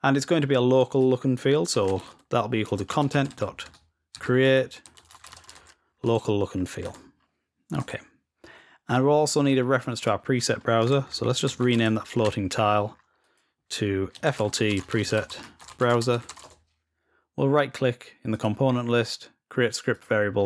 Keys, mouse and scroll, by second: 9.8 click, 13.0-14.3 drag, 18.1 middle click, 18.1 scroll down 1, 19.7 click.